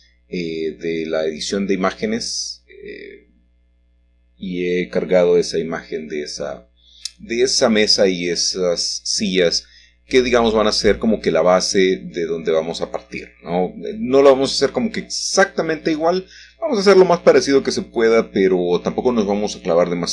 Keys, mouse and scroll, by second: 1.2 g, 1.9 shift+z, 4.0 click, 5.2 middle click, 5.5 scroll down 1, 5.6-7.3 scroll up 3, 6.1-8.7 shift+middle drag, 7.3-8.7 scroll up 1, 9.5 click, 9.9-11.0 middle drag, 11.0-12.0 scroll up 1, 12.3 g, 12.9 z, 13.9 click, 15.0 s, 15.2 z, 16.9 click, 18.1 shift+middle click.